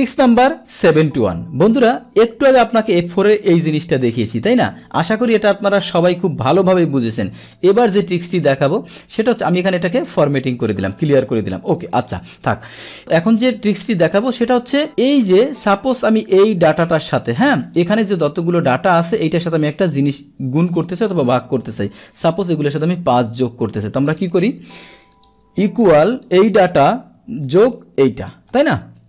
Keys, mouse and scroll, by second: 2.5 click, 5.2 click, 7.5 click, 9.3 click, 10.0 click, 11.7 ctrl+z, 12.0 click, 12.1 ctrl+z, 13.0 click, 15.2 click, 16.5 click, 17.1 click, 17.6 click, 19.9 click, 23.3 click, 25.2 click, 26.2-27.2 drag, 28.2 click, 28.6 Return.